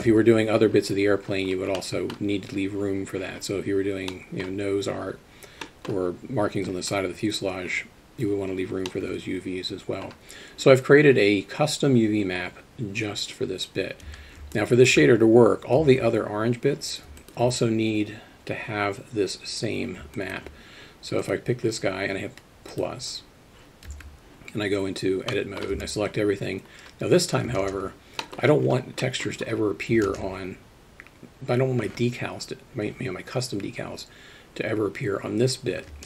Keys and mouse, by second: 1.8 middle click, 4.1-4.4 middle drag, 5.6 middle drag, 8.9-10.0 middle drag, 14.1 Tab, 14.6 alt+middle click, 17.2 alt+middle click, 20.2 alt+middle click, 23.9 Tab, 25.3 middle click, 25.7 a, 30.1 ctrl+space.